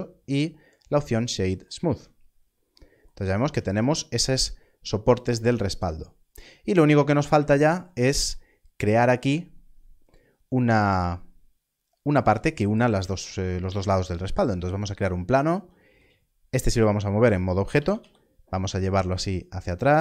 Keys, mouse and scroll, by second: 1.8 alt+a, 2.2 scroll down 1, 6.1 scroll up 1, 6.8 scroll down 1, 13.1 shift+a, 17.7 click, 17.9 g, 17.9 y, 19.6 click.